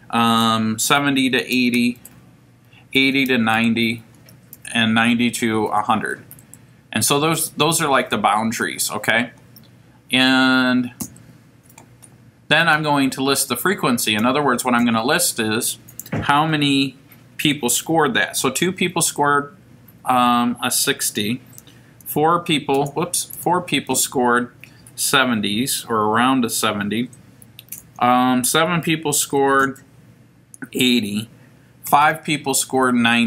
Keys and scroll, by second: 1.3 8, 1.6 0, 1.9 Down, 2.7-4.5 typing, 6.5 Right, 11.0 Down, 14.8 Right, 18.4 2, 19.1 Down, 22.0 5, 23.3 4, 23.9 Down, 27.8 7, 29.6 Down, 31.9 5, 32.7 Down.